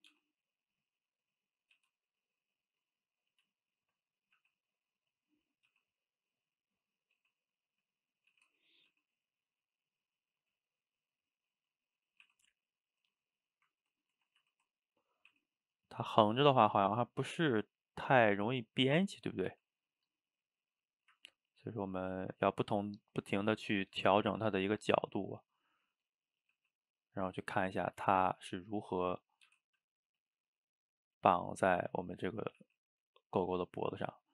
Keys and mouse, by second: 0.1 g, 1.4 click, 1.8 g, 2.5 middle click, 3.4 click, 3.8 shift+click, 4.0 middle click, 4.4 g, 5.3-5.7 middle drag, 5.7 g, 6.5-7.2 middle drag, 7.2 g, 7.9-8.3 middle drag, 8.3 g, 8.9 g, 10.0-11.7 middle drag, 11.7 drag, 11.9-12.3 middle drag, 12.3 e, 13.2-14.4 middle drag, 14.4 ctrl+z, 15.3 e, 16.6 shift+click, 17.4 g, 18.4-19.6 middle drag, 19.6 g, 20.8-21.6 middle drag, 21.6 click, 21.8-22.2 middle drag, 22.2 g, 23.2-24.0 middle drag, 24.0 g, 24.8 g, 26.4 click, 26.6 g, 27.2-29.5 middle drag, 29.5 g, 30.3-31.6 shift+middle drag, 31.6 click, 32.0 shift+click, 32.2 shift+click, 32.6 g, 33.6-34.3 middle drag.